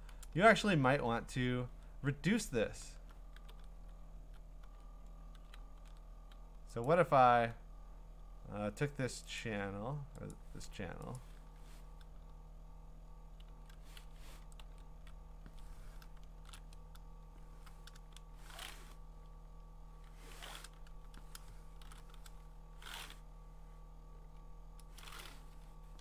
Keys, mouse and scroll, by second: 0.2 ctrl+z, 0.7-2.9 scroll, 3.3 ctrl+d, 4.0 ctrl+scroll, 4.6 ctrl+z, 4.8-5.4 scroll down 2, 5.8 ctrl+d, 6.8 click, 9.4 click, 10.3 click, 11.2 click, 11.4 ctrl+t, 13.5 ctrl+z, 14.1 Escape, 14.6 ctrl+z, 16.4 ctrl+shift+i, 17.4 ctrl+z, 21.8 ctrl+shift+i, 24.1 Delete, 25.6 Escape.